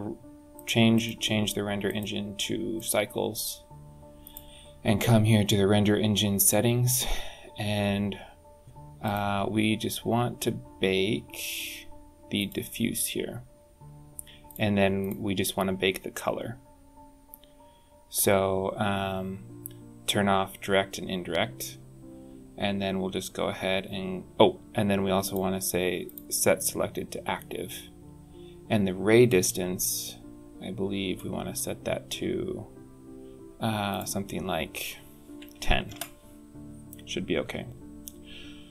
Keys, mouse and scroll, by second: 0.4 click, 0.9 click, 1.7 click, 4.1 click, 6.0-7.1 scroll down 10, 8.9 click, 14.3 click, 14.9 click, 17.5 scroll down 5, 25.1 click, 25.9 click, 26.5 scroll down 5, 29.1 middle click, 33.8 click.